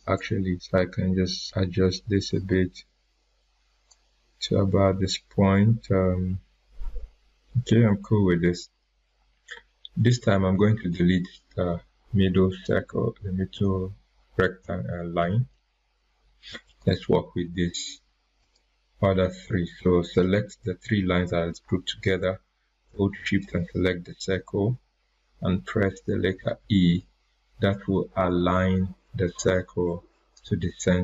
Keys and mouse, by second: 0.1-6.2 drag, 10.5 ctrl+Num_Lock, 10.7 ctrl+click, 15.1 Delete, 16.6 click, 23.3 shift+Num_Lock, 23.3 shift+click, 26.6 e.